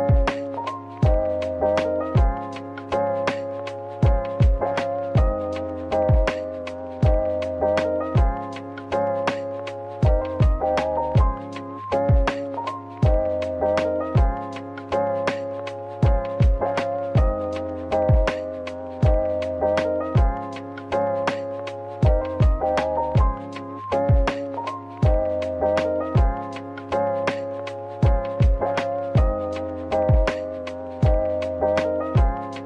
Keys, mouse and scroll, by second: 0.7 Tab, 1.4 Tab, 2.6-2.9 typing, 3.4 middle click, 10.4-11.2 typing, 13.2 typing, 15.0 typing, 19.3-20.4 typing, 21.5 typing, 23.2 typing, 25.2 ctrl+r, 26.2 double click, 26.6 ctrl+r, 27.0 double click, 28.0 scroll down 1, 28.2 middle click, 29.1 typing, 30.1 typing, 31.8 typing.